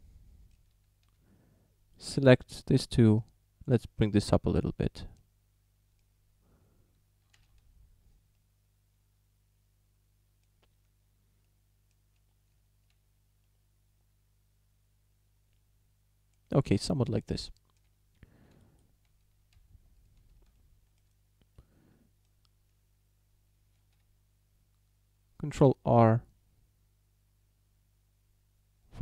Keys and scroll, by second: 0.8 a, 7.4 alt+h, 12.6 Tab, 19.1 Tab, 20.2 a, 23.8 ctrl+r.